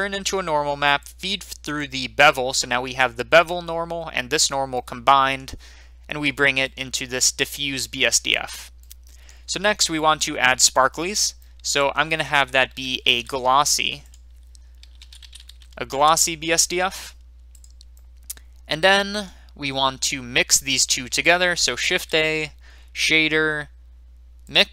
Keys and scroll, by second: 13.0 a, 14.8-15.5 typing, 15.9 Return, 18.4-19.2 typing.